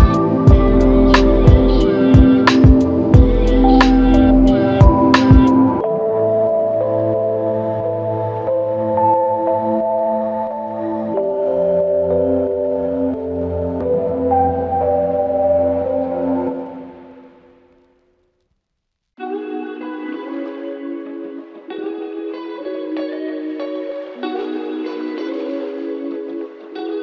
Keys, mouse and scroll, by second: 0.7 alt+click, 8.9 double click, 9.8 shift+click, 13.0 shift+click, 14.1 alt+click, 17.2 shift+click, 19.9 shift+click, 22.8 alt+click.